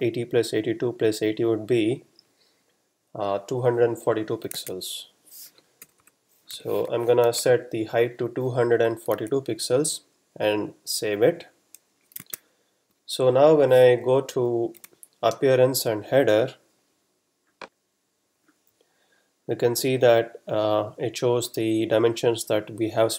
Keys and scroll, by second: 4.6 super+Tab, 5.8 BackSpace, 6.5 2, 7.3 2, 9.7 super+s, 12.6 super+Tab, 14.3 F12, 14.8 a.